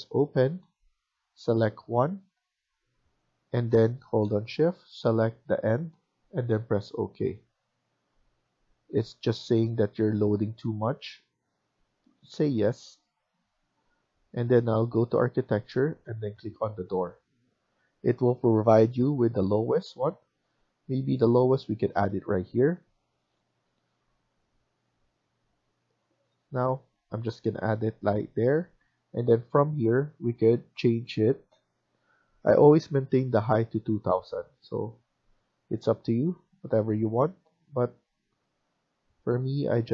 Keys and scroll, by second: 20.2 Escape, 26.5 Escape, 26.8 Escape, 36.9 Escape, 37.2 Escape.